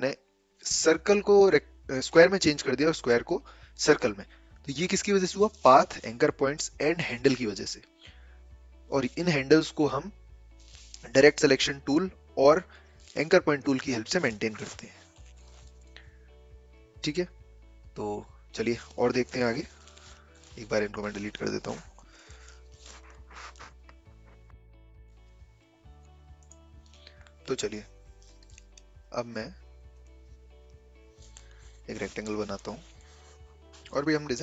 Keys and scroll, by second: 19.3 v, 21.7 Delete, 32.4 Delete.